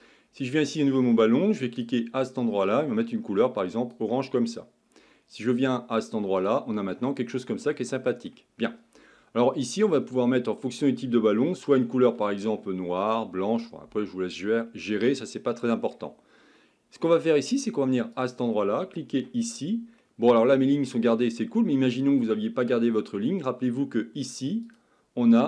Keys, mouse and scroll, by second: 0.5 click, 1.7 click, 6.6 click, 7.1-10.2 middle drag, 10.2-10.7 scroll up 2, 10.7-11.5 scroll down 1, 11.5-14.6 shift+middle drag, 14.8-17.9 middle drag, 18.1 click, 19.2 Tab, 20.0-23.2 middle drag, 24.6 click.